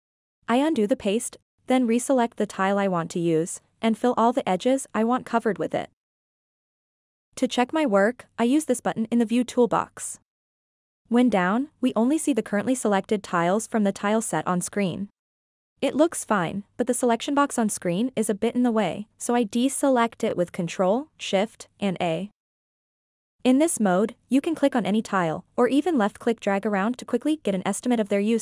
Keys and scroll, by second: 0.6 ctrl+z, 3.7 f, 4.9 f, 6.4 f, 7.4 f.